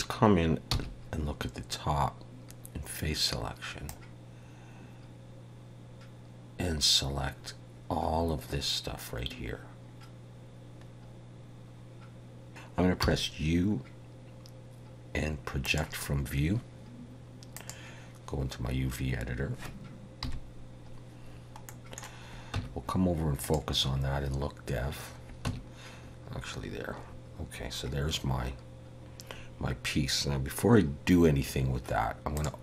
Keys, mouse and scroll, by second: 0.8 c.